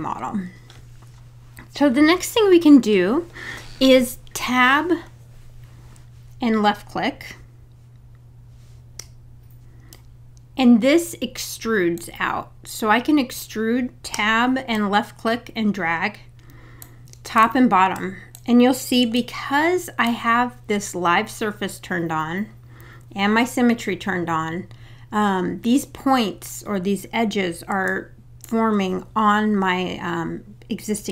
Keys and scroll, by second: 9.0 Tab, 14.1 Tab.